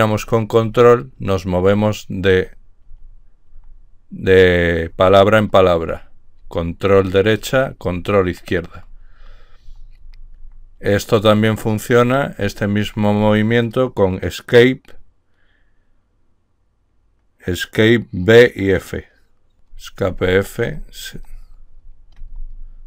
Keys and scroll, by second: 0.5 ctrl+Left, 0.9 ctrl+Left, 1.6 ctrl+Left, 2.0 ctrl+Left, 2.6 ctrl+Left, 3.4 ctrl+Left, 5.2 ctrl+Right, 6.2 ctrl+Right, 6.7 ctrl+Right, 7.2 ctrl+Right, 7.7 ctrl+Right, 9.4 ctrl+Left, 9.9 ctrl+Left, 10.3 ctrl+Left, 10.7 ctrl+Left, 11.2 ctrl+Left, 11.6 ctrl+Left, 19.7 Escape, 20.1-21.9 typing, 21.8 Escape, 22.7 Escape.